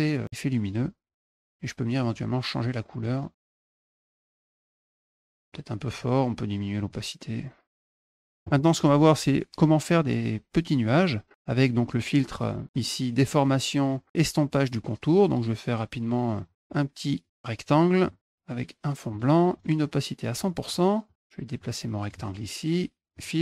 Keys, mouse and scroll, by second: 1.8 click, 2.8 click, 3.7 click, 4.5 ctrl+shift+click, 5.0 scroll up 1, 6.7-7.8 drag, 7.9 click, 16.3 click, 17.0 click, 18.9 click, 19.4 right click, 20.2 click, 21.4 click, 23.0 click.